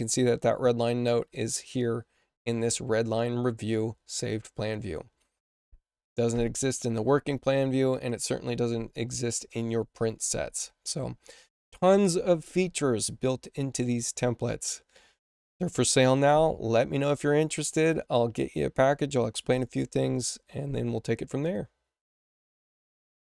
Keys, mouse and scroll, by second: 4.5 click, 6.1 click, 7.8 click, 9.4 click.